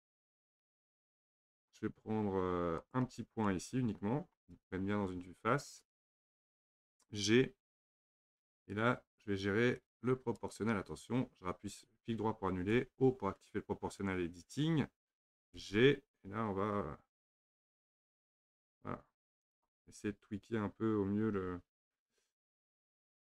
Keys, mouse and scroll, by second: 2.8 click, 3.5-5.3 middle drag, 5.3 KP_3, 7.9 g, 12.7 o, 15.6 g, 22.6 shift+z.